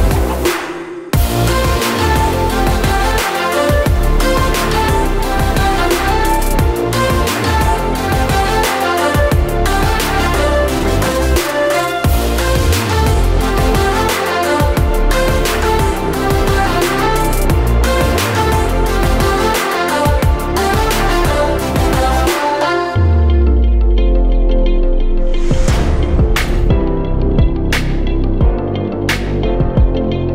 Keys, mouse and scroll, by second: 16.9 click.